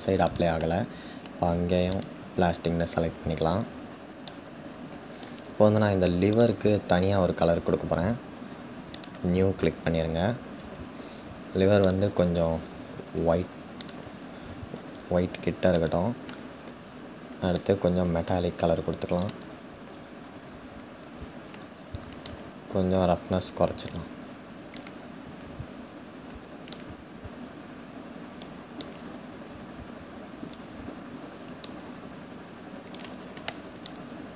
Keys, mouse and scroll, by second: 1.6-3.8 drag, 4.0-6.0 drag, 8.7-12.2 drag, 17.5-19.5 drag, 19.5-20.2 scroll up 3, 20.2-20.6 scroll down 1, 22.4-34.3 drag.